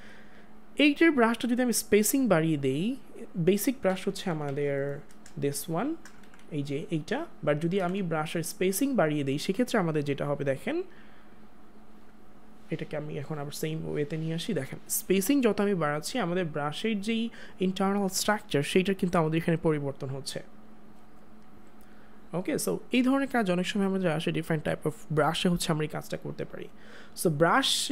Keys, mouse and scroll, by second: 1.2 click, 4.0 [, 6.2 ctrl+z, 15.3 click.